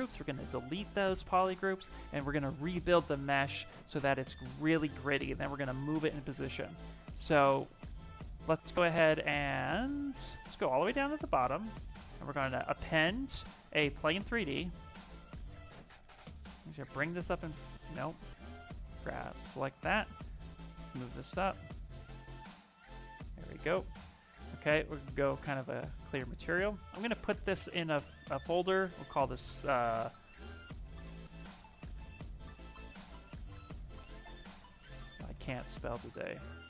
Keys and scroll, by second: 15.7 w, 17.3 ctrl+z, 26.9 ctrl+f, 29.1 shift+s, 30.5-36.6 typing, 35.1 Caps_Lock.